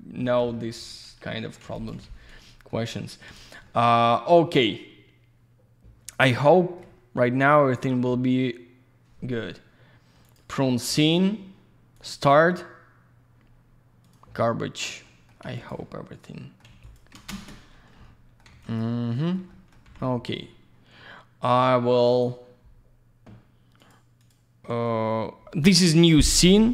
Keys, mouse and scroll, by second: 0.4 ctrl+shift+F4, 1.3 ctrl+alt+shift+middle click, 1.6 ctrl+alt+shift+z, 1.7 ctrl+shift+click, 1.9 ctrl+shift+click, 1.9 ctrl+shift+F4, 2.4 ctrl+shift+middle click, 2.9 ctrl+alt+shift+middle click, 3.3 ctrl+alt+shift+z, 3.3 ctrl+shift+click, 3.5 ctrl+shift+click, 3.6 ctrl+alt+shift+middle click, 10.2 ctrl+shift+click, 12.0 ctrl+shift+click, 14.0 ctrl+shift+click, 15.0 ctrl+alt+shift+middle click, 15.4 ctrl+alt+shift+z, 15.6 ctrl+shift+click, 15.8 ctrl+alt+shift+middle click, 16.7 ctrl+alt+shift+z, 16.8 ctrl+shift+click, 17.3 ctrl+shift+space, 18.0 alt+middle click, 18.5 alt+z, 18.6 click, 18.9 alt+middle click, 19.5 middle click, 19.8 m, 22.1 click, 22.2 click, 23.8 click, 23.9 click, 24.2 click, 24.3 click.